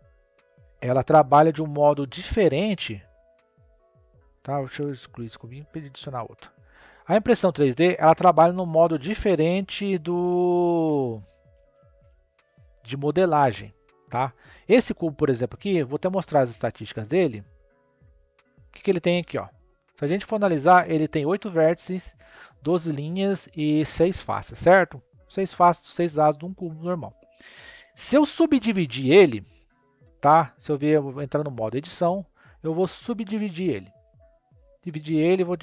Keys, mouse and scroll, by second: 0.1-1.1 scroll up 1, 3.3 x, 5.3 shift+a, 9.3 g, 13.0 click, 14.3 click, 15.4-16.9 middle drag, 16.9-18.7 drag, 18.7-19.9 scroll up 4, 19.9-22.4 scroll down 1, 26.4-29.4 middle drag, 29.4-30.8 right drag, 30.8 click, 31.3 click, 32.8-35.6 right drag.